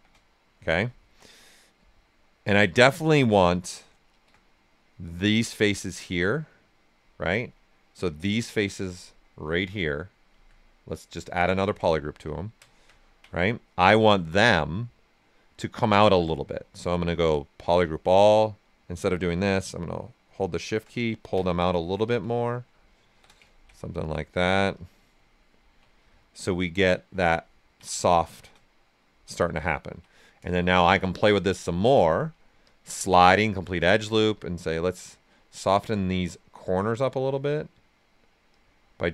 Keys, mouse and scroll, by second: 0.2 right click, 0.2 shift+click, 0.6 right click, 1.7-4.1 right drag, 4.1 shift+d, 4.4 right click, 7.9 alt+click, 9.0 right click, 9.4-11.5 alt+drag, 11.5 ctrl+right click, 11.8 right click, 12.3 ctrl+right click, 12.9 ctrl+alt+right click, 13.7 ctrl+space, 16.7 space, 18.4-21.0 ctrl+drag, 21.0 ctrl+right click, 22.0 d, 22.4 right click, 23.1 shift+f, 23.4 ctrl+right click, 24.7 click, 25.4 ctrl+right click, 26.2 right click, 28.1 shift+f, 28.6 right click, 30.8 shift+f, 31.9 space, 32.6 click, 33.3 space, 34.1 click, 35.2-37.3 right drag, 37.3 click, 38.5 click.